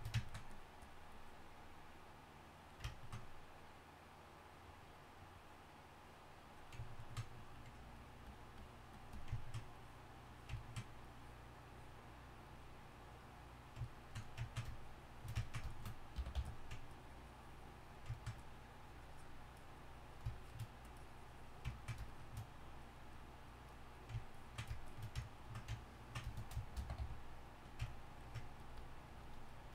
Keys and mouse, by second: 16.3 y, 16.4 f, 27.0 c, 27.6 f.